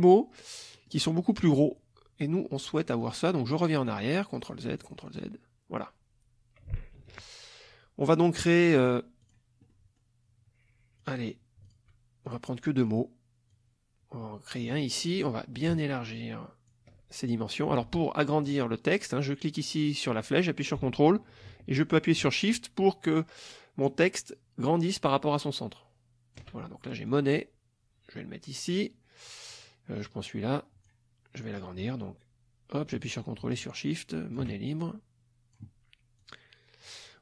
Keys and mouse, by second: 0.7 middle click, 1.2 middle click, 3.0 click, 3.8 click, 4.4 click, 4.8 click, 7.0 ctrl+shift+z, 8.8 click, 9.2 click, 9.7 middle click, 9.8 click, 11.0 click, 11.6 shift+click, 12.3 shift+click, 12.8 click, 13.5-14.7 drag, 15.6-16.9 ctrl+shift+drag, 17.9 ctrl+z, 19.6-26.6 drag, 27.0-28.9 drag, 29.5 click, 30.1-31.0 drag, 32.0-34.5 drag, 34.8 ctrl+shift+click, 36.2 click.